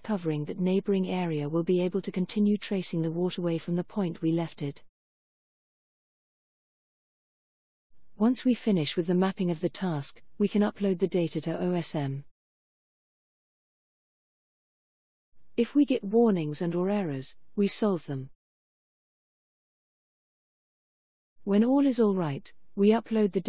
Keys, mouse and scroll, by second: 0.0 click, 9.4 click, 10.0 right click, 14.0 click.